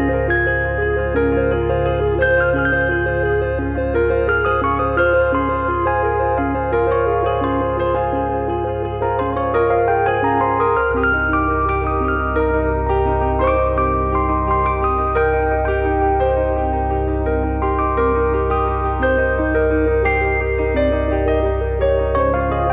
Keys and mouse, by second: 1.0 click, 2.2 click, 2.4 click, 3.2 middle click, 3.5 shift+middle click, 4.0 click, 4.8 click, 6.7 click, 7.5 click, 7.7 click, 8.4 click, 9.6 click, 9.9 click, 10.5 shift+middle click, 11.0 click, 12.4 click, 13.4 shift+middle click, 13.9 click, 14.8 click, 15.4 click, 16.7 click, 18.0 click, 18.9 alt+z, 19.2 click, 21.4 click.